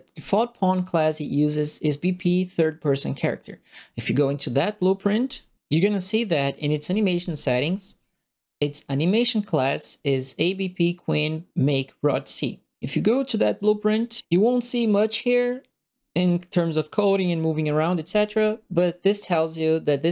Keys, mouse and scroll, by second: 13.5 click, 16.8 right click.